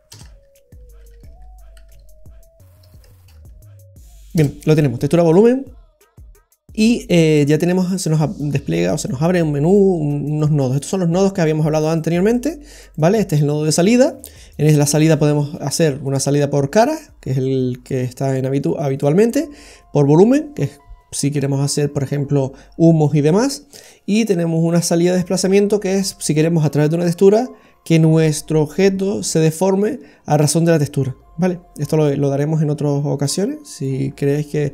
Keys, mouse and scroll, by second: 6.6 scroll down 2, 6.8 middle click, 10.3 click, 11.8 click, 12.3 click, 33.2 click.